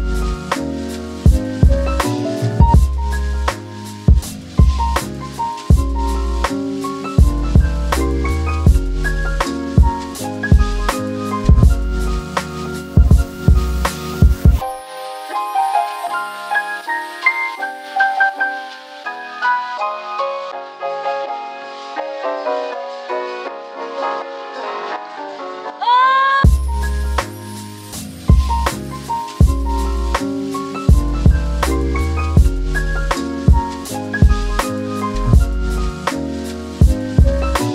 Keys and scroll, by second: 12.6 space, 34.4 space.